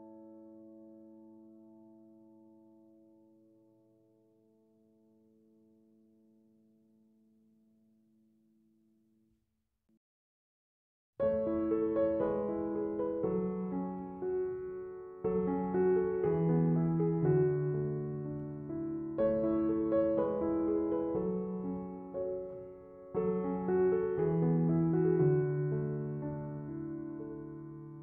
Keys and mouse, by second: 11.9 click, 18.1 click.